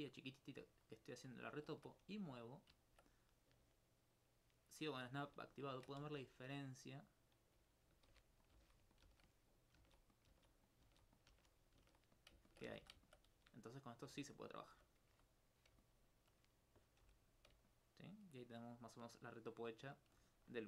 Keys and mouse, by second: 0.6 Tab, 4.6 right click, 5.6 alt+click, 6.7-7.8 right drag, 8.1 shift+d, 8.5 click, 10.2 click, 10.9 shift+d, 11.2 click, 11.7 click, 12.2 click, 12.5 ctrl+alt+click, 13.1 alt+click, 14.1 click, 15.9 alt+click, 16.7 right click, 17.1 h, 17.7 alt+click, 20.3 alt+click.